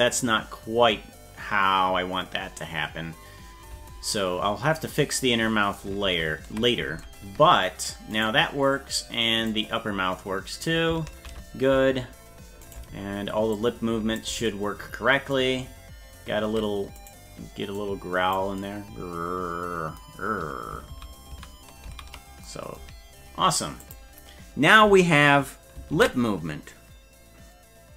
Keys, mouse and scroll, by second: 6.1 ctrl+z, 8.2 right click, 9.5-10.7 drag, 11.2 ctrl+z, 12.7 right click, 13.6 click, 17.1 right click, 17.8 click, 21.0 ctrl+z, 21.5 ctrl+z, 22.0 ctrl+z, 23.8 click, 26.3 ctrl+s.